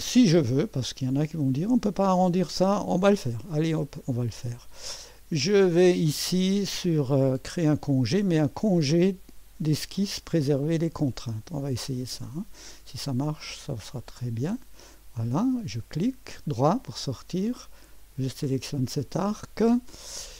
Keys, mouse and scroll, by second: 0.0-0.4 scroll up 1, 0.4 middle click, 0.7 right click, 3.4-3.8 scroll up 1, 3.8-7.2 right drag, 7.9 click, 11.8 click, 14.2 click, 15.4 right click, 18.0 click.